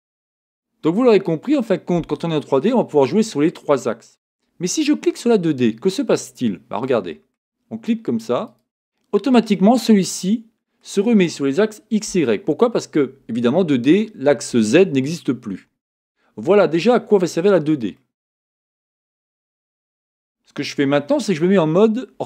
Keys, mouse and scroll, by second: 8.4 click, 9.3-22.2 middle drag, 19.7 KP_1, 22.1 scroll down 2.